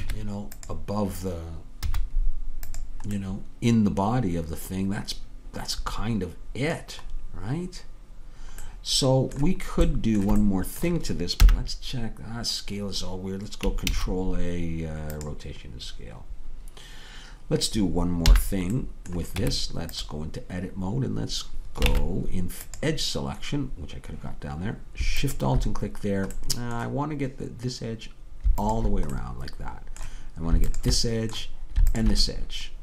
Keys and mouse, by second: 0.1 Tab, 1.9 z, 3.3 middle click, 7.2-10.7 middle drag, 11.5 n, 14.0 ctrl+a, 18.4 n, 19.4 Tab, 22.0 ctrl+Tab, 25.5-27.6 drag, 27.6-29.7 middle drag, 29.6-32.8 drag.